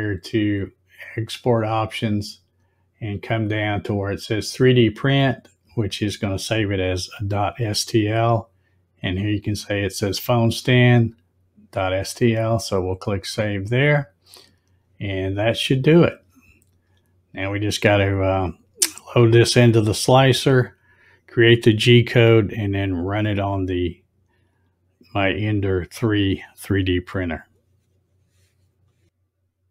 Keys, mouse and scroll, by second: 1.1 click, 2.0 click, 6.7 click, 12.9 click.